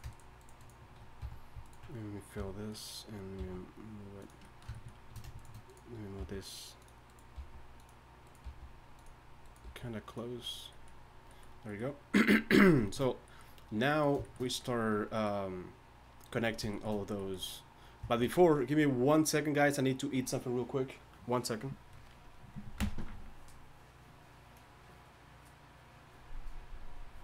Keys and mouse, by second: 1.2 f, 2.4 f, 3.4 g, 6.2 g, 7.3 g, 8.4 g, 9.6 g.